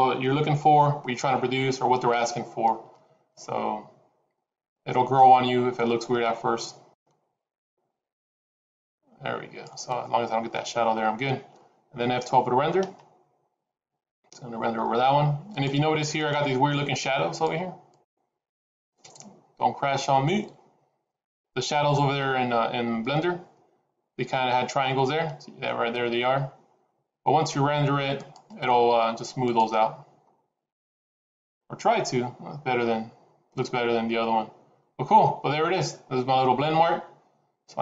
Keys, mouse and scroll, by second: 6.9 click, 25.1-25.6 scroll up 4.